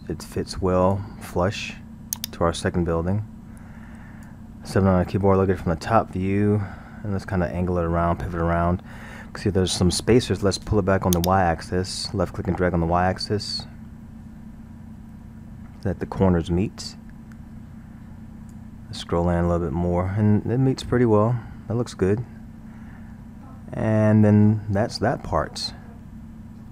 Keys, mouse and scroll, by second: 2.2-5.1 drag, 5.1 KP_7, 6.5-9.1 middle drag, 9.1-11.2 scroll, 11.2-14.2 drag, 18.9 scroll, 21.3-24.2 middle drag.